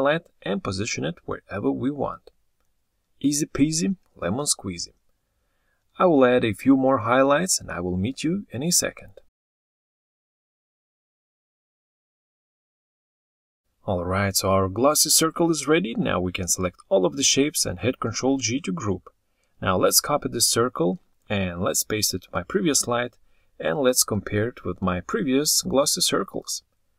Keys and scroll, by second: 12.1 ctrl+z, 17.5 ctrl+g, 18.7 ctrl+c, 22.8 ctrl+v.